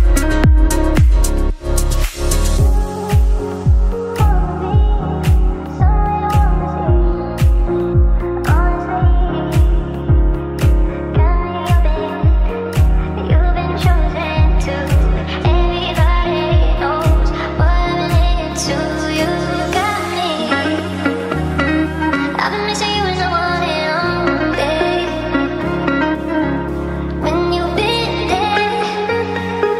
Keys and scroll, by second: 15.8 ctrl+z, 23.8 Delete, 26.2 ctrl+z.